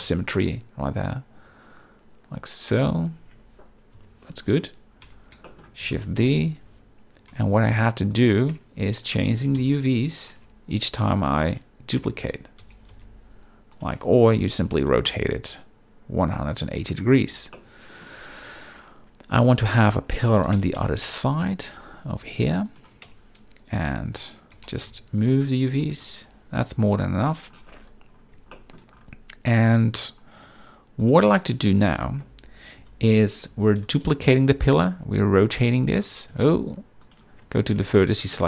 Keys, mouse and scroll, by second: 0.0 z, 0.3-2.8 middle drag, 3.9 KP_7, 5.0 z, 5.4 shift+middle drag, 5.8 shift+d, 5.9 right click, 6.2 g, 6.4 y, 8.1 shift+click, 8.6 Tab, 9.4 g, 9.6 y, 10.1 click, 10.4 Tab, 11.0 click, 11.5 click, 12.0 Tab, 12.6 g, 12.9 y, 14.0 Tab, 14.4 r, 16.5 ctrl+click, 17.5-18.0 shift+middle drag, 19.4 click, 20.3 shift+d, 20.3 right click, 20.5 g, 20.8 x, 22.7 shift+click, 23.1 Tab, 24.5 g, 24.8 y, 25.8 click, 26.0 Tab, 28.5 shift+middle drag, 31.0 click, 31.4 click, 32.8 KP_3, 33.8 shift+d, 33.9 right click, 34.2 r, 36.3 r, 37.4 Tab, 38.0 shift+middle click.